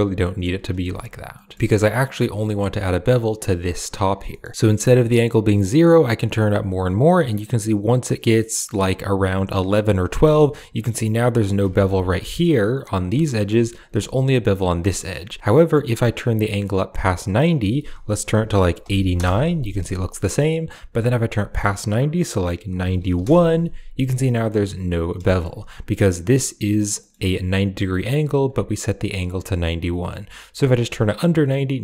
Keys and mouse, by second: 0.6 shift+middle click, 1.2 middle click, 1.4 shift+middle click, 1.6 middle click, 4.1 middle click, 5.3-9.8 drag, 10.2 middle click, 11.6 Tab, 13.1 middle click, 13.5 Tab, 14.8 middle click, 15.4-17.2 drag, 17.4-19.0 drag, 21.0-23.1 drag, 24.3-25.0 middle drag, 25.1 shift+middle click, 26.8 middle click, 30.1-31.3 drag.